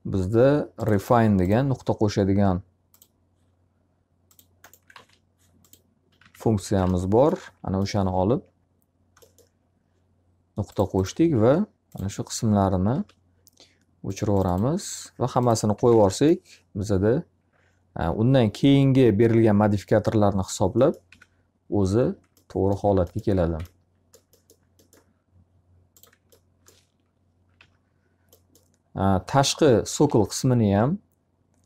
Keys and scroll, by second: 4.5 alt+a, 6.1 x, 6.8 alt+a, 6.8 z, 7.4 z, 12.5 alt+r, 15.7 z, 15.9 alt+a, 20.7 F3, 23.3 q, 27.1 d, 30.0 q.